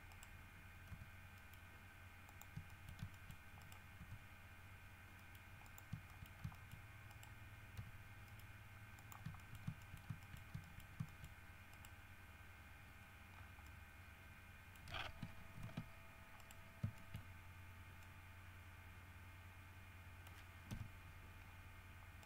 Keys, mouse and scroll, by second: 0.3 shift+right click, 1.1 g, 1.6 middle click, 2.5 shift+middle click, 2.9 shift+middle click, 3.5 shift+middle click, 3.8 shift+right click, 4.2 shift+g, 5.4 middle click, 5.8 shift+middle click, 6.3 shift+middle click, 6.7 shift+middle click, 7.3 shift+right click, 8.0 g, 8.5 middle click, 9.2 click, 9.4 shift+middle click, 9.6 shift+middle click, 10.1 shift+scroll down 2, 10.4 shift+middle click, 10.8 shift+middle click, 11.3 shift+middle click, 11.9 middle click, 13.2-13.8 scroll down 2, 13.8-15.1 middle drag, 15.8 alt+h, 16.6 middle click, 17.2 shift+middle click, 18.3-20.7 middle drag, 20.9 KP_1, 21.6 scroll up 2.